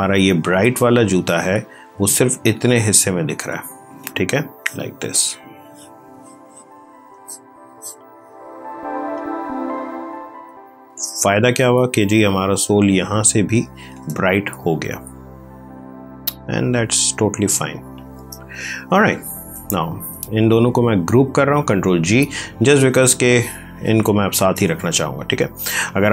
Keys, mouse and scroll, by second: 0.7 click, 10.3 ctrl+d, 11.9 click, 14.4 ctrl+click, 14.5 ctrl+space, 19.7 shift+click, 21.8 ctrl+g, 22.9 space, 23.2 click, 23.4 space.